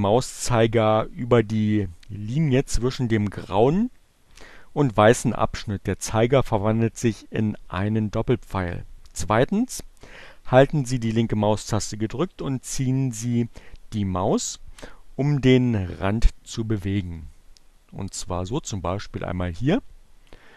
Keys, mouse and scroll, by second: 20.4-20.5 drag.